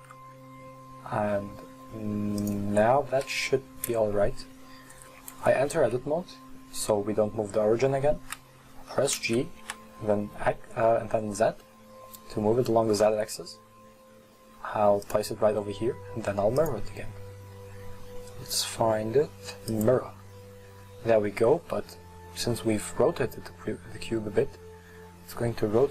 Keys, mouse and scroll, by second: 2.1 click, 2.1 right click, 3.2 KP_1, 3.9-5.3 scroll up 1, 5.3 Tab, 5.6-7.4 right drag, 7.4-9.2 scroll up 2, 9.2 g, 15.6 Tab, 16.6-19.8 drag, 22.6-25.9 middle drag.